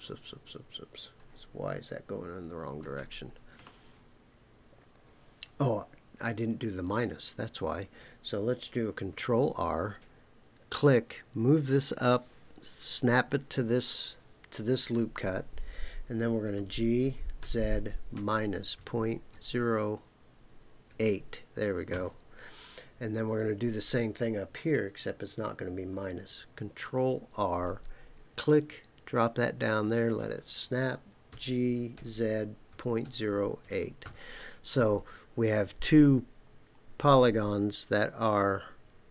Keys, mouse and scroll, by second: 1.1 Escape, 2.8 ctrl+z, 9.1 ctrl+r, 13.2 click, 16.5-19.3 typing, 20.9 KP_8, 21.9 KP_Enter, 26.8 ctrl+r, 30.0 click, 31.3-33.6 typing, 34.0 KP_Enter.